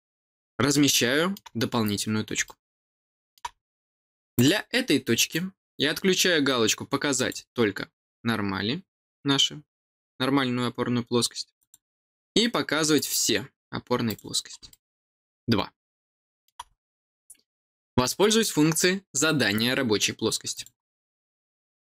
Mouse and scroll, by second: 1.7 scroll up 1, 2.4 middle click, 4.3 click, 7.1 click, 11.5 click, 12.9 click, 14.0 click, 14.6-16.4 middle drag, 20.5 click.